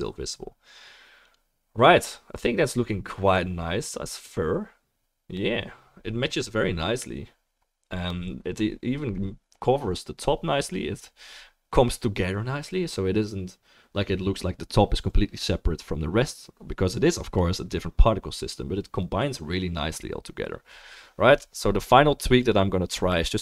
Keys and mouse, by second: 1.3-23.4 middle drag.